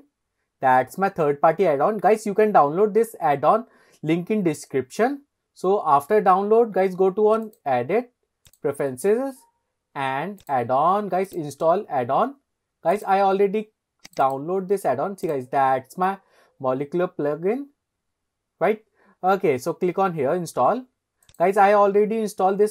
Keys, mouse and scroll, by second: 7.5-9.3 drag.